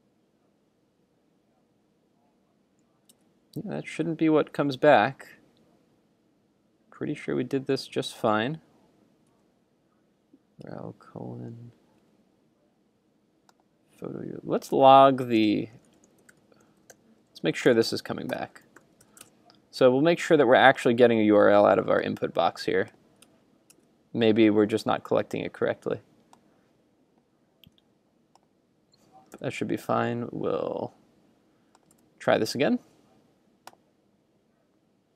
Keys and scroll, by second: 3.1 super+Tab, 7.8 super+Tab, 19.0 super+s, 19.4 super+Tab, 23.3 super+Tab, 29.4 super+r, 32.1 super+v.